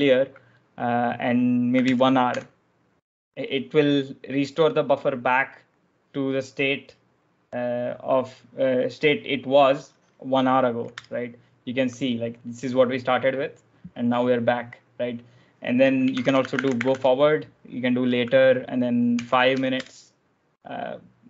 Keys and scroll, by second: 1.5-2.6 typing, 10.8 Return, 15.8-17.3 typing, 18.7-19.6 typing.